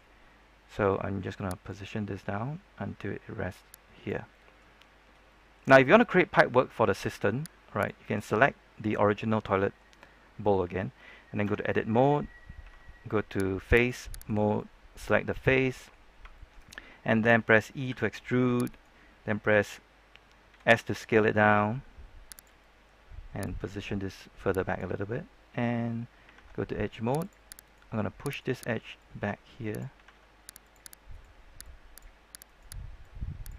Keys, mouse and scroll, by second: 0.3-1.6 scroll up 1, 1.6-4.2 drag, 4.2 middle click, 4.9 scroll up 1, 5.2 middle click, 5.7 scroll down 1, 5.9 middle click, 7.4 scroll up 1, 7.7 right click, 8.7 scroll down 1, 8.8 middle click, 8.9-9.5 scroll up 1, 9.5-11.3 middle drag, 11.6 Tab, 12.6 ctrl+Tab, 13.7 click, 14.2 right click, 14.5 middle click, 16.3 shift+middle click, 17.8 e, 18.6 right click, 20.4 s, 22.3 click, 22.5 middle click, 23.4-25.5 drag, 27.1 ctrl+Tab, 27.1 click, 27.6 right click, 28.9 click, 30.6 ctrl+Tab, 30.6 click, 31.1 right click, 31.6 click, 32.4 right click, 33.0 click.